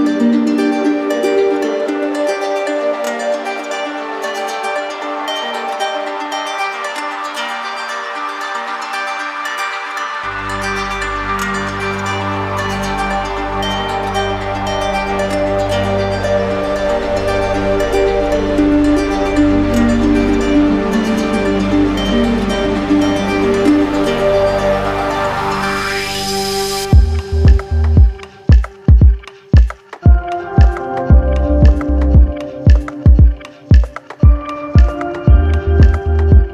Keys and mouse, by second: 0.4 ctrl+z, 2.4 click, 4.4 click, 5.1 ctrl+z, 7.7 click, 9.5 click, 12.0 click, 14.5 click, 15.6 click, 17.7 click, 18.6 click, 22.0 click, 22.7 right click, 24.1 ctrl+click, 25.5 ctrl+z, 27.5-29.1 ctrl+drag, 29.6 z, 31.3 click, 32.3 right click, 33.1 click, 33.8 shift+right click, 36.0 right click.